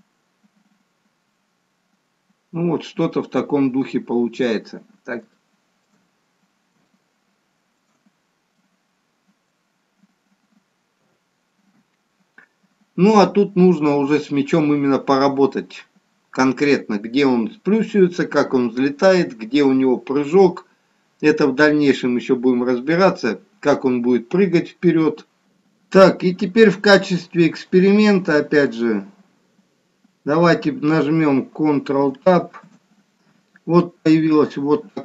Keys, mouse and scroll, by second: 4.1-5.3 scroll up 4, 5.3 scroll up 2, 5.5 shift+middle click, 6.1-6.8 scroll down 3, 6.9 middle click, 9.1 middle click, 9.7-11.1 scroll down 1, 11.1-11.7 scroll down 1, 11.1 KP_1, 26.3-27.1 scroll up 8, 27.2 middle click, 29.2-29.8 scroll up 1, 29.8 scroll up 1, 32.7 ctrl+Tab.